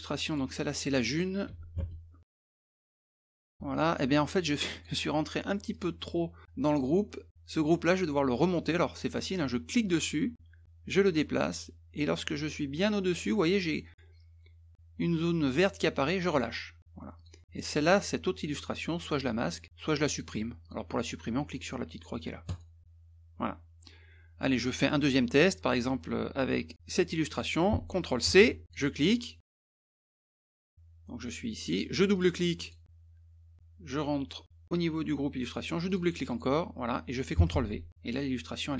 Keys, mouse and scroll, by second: 0.2 click, 0.3 click, 1.5-3.8 typing, 4.7 click, 5.7 click, 6.7 click, 7.8-9.1 drag, 9.7-16.2 drag, 17.2 click, 17.9 click, 19.1 click, 20.1 click, 20.6 click, 22.5 click, 28.2 ctrl+c, 28.6 click, 29.8-30.2 scroll up 4, 30.6 click, 32.1 click, 32.3 click, 32.6 click, 35.9 click, 36.0 click, 36.3 click, 37.5 ctrl+v.